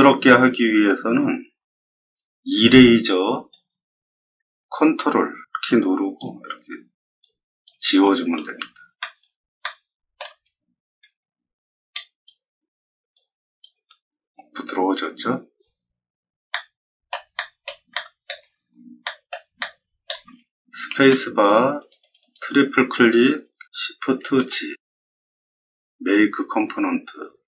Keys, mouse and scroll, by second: 2.5 e, 3.5 middle click, 5.6-6.1 ctrl+drag, 7.1-7.6 ctrl+drag, 8.3 middle drag, 8.9 shift+middle drag, 9.6-10.1 shift+middle drag, 11.9-12.2 ctrl+drag, 13.1 ctrl+click, 15.5 scroll down 1, 16.4 middle click, 17.3 middle click, 17.9 shift+middle click, 19.0 middle click, 19.5 middle click, 21.7 click, 21.9 click, 22.1 click, 24.1 shift+g.